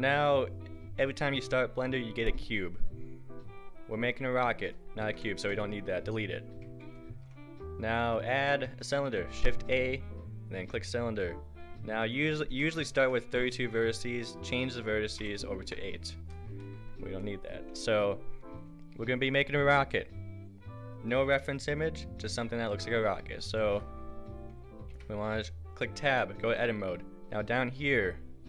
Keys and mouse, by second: 7.0 Delete, 7.1 shift+a, 16.6-24.9 drag, 24.9 Tab.